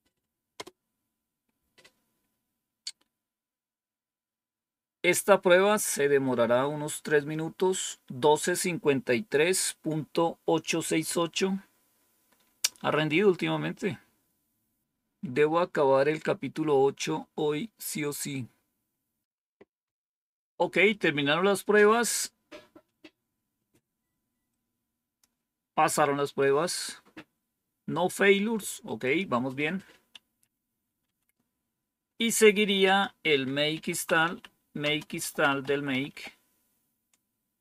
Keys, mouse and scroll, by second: 0.5 Return, 24.4 click, 28.0 click, 29.0 click, 30.2 Up, 30.9 Down, 32.8 click, 33.4-36.3 typing.